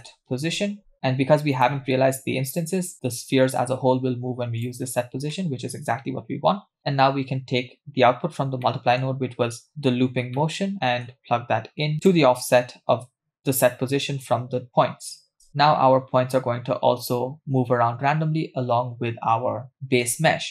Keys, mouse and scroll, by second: 4.6 click, 5.3 middle click, 5.8-7.0 scroll down 2, 8.6-9.7 scroll up 2, 8.6 middle click, 9.7-10.3 scroll up 1, 10.4 middle click, 11.9 scroll down 1, 12.1-14.7 drag, 15.3 scroll up 2, 15.5 scroll down 1, 15.5 space, 16.5-17.1 scroll down 1, 17.1 scroll down 1.